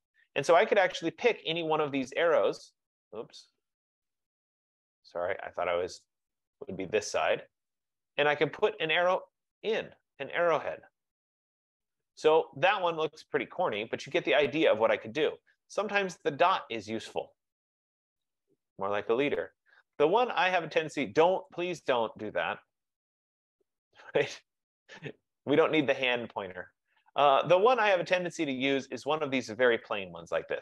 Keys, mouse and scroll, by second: 1.8 click, 4.2 click, 5.1 scroll, 6.1 click, 6.8 click, 8.1 click, 9.6 click, 10.7 F15, 10.7 click, 12.9 click, 14.1-15.1 scroll down 2, 16.2 click, 17.1-18.0 scroll, 18.4 click, 19.3-20.2 scroll, 20.4-20.9 scroll, 21.6 click, 25.2 click, 26.4-26.9 scroll, 26.9 middle click, 27.9 middle click, 29.5 click.